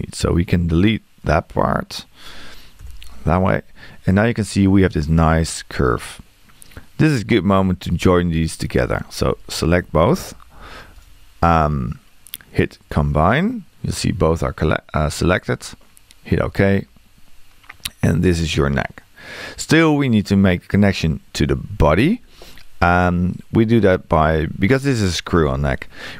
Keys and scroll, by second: 2.8 BackSpace.